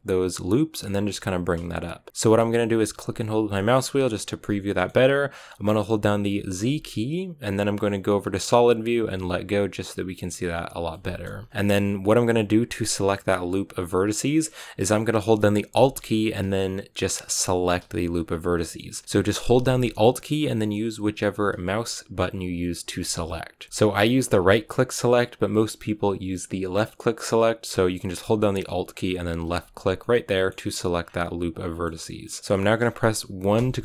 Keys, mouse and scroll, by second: 2.7-3.9 middle drag, 3.9-4.6 scroll down 4, 4.6-9.0 middle drag, 9.0 z, 9.5-11.3 middle drag, 11.3 scroll up 1, 11.4-14.3 middle drag, 14.3-17.5 scroll up 1, 17.5 alt+right click, 18.4-22.6 middle drag, 22.6 alt+right click, 23.2 middle click, 24.0-29.5 alt+right drag, 29.5 scroll down 1, 29.7 scroll up 2, 29.9-30.9 middle drag, 30.9 scroll down 3, 31.1-33.5 middle drag, 33.5 KP_1.